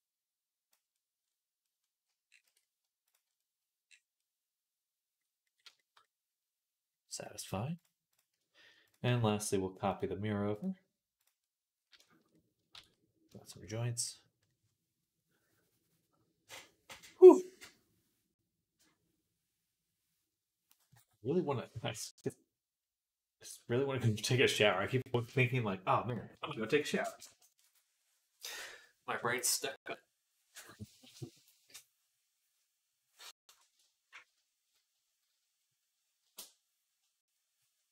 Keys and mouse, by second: 2.3 Tab, 2.9-7.6 middle drag, 7.6 shift+click, 7.7-9.8 shift+middle drag, 9.8-11.1 drag, 11.1-37.9 middle drag, 12.6 ctrl+s.